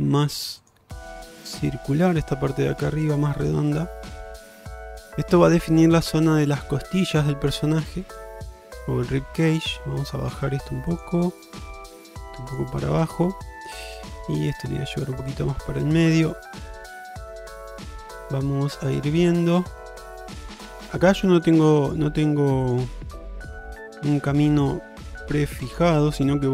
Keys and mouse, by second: 1.3 click, 1.7 g, 3.8 click, 4.2 g, 6.4 middle click, 7.7-8.5 middle drag, 9.9 click, 11.0 click, 11.5-12.6 drag, 13.0 shift+middle drag, 14.1-15.1 drag, 15.7 shift+middle click, 16.2-20.7 middle drag, 20.9 shift+middle click, 21.2 middle click, 23.8 g, 24.9 middle click, 25.8 click, 26.2 g.